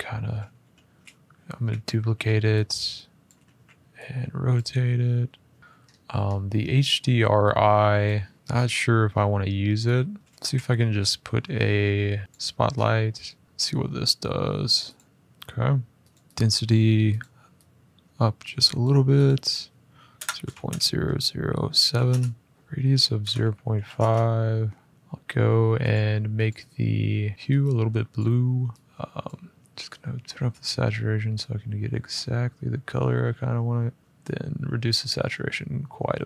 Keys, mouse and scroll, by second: 0.0 middle click, 0.4 d, 1.3 Escape, 1.9 r, 3.0 click, 3.2 ctrl+z, 4.3 click, 5.1-6.0 scroll, 5.3 g, 7.8 click, 8.3 click, 8.4 click, 10.1 click, 10.2-12.2 scroll, 10.2 a, 12.2 click, 12.5 scroll, 13.4 middle click, 14.7 click, 15.0 middle click, 15.8 click, 16.9 click, 18.5 click, 19.0 click, 19.9-20.4 typing, 21.6-23.7 typing, 22.5 click, 24.9 click, 26.2 click, 27.3 click, 27.9 click, 34.0 click.